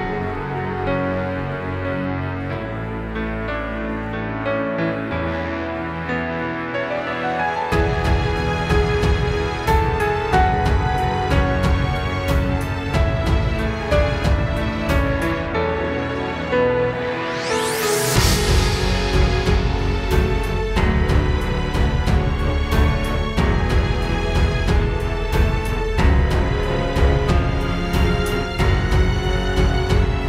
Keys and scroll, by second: 0.3 space, 2.6 super+[, 3.5 space, 4.2 super+space, 8.9 space, 9.5 space, 9.9 space, 10.4 super+space, 20.4 space, 23.2 space, 26.2 space.